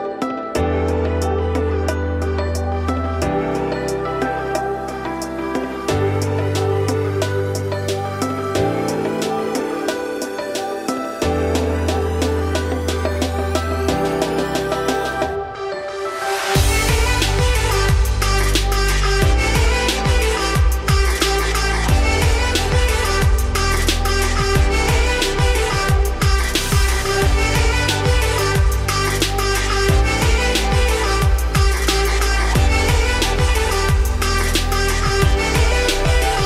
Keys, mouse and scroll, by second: 0.8-2.4 scroll down 5, 2.4-5.6 drag, 8.3-8.6 scroll up 1, 8.6-9.7 shift+middle drag, 9.7 z, 10.3 click, 11.2 g, 13.0-16.1 drag, 16.1 KP_4, 17.3 scroll down 3, 17.6 Tab, 18.0 z, 18.4-19.4 middle drag, 19.4 ctrl+s, 20.9-22.0 scroll up 3, 22.0 click, 23.4 click, 23.8 click, 24.3 click, 25.2 g, 26.7 click, 27.0 Tab, 27.3 scroll down 4, 27.5 1, 27.8 `, 28.3 z, 28.8 shift+middle click, 29.6 click, 30.1 z, 30.6 middle click, 31.3 g, 32.3 z, 32.8 middle click, 33.4 g, 34.8 Tab, 35.1 click, 35.5 `, 35.9 Tab, 36.1-36.4 scroll up 4.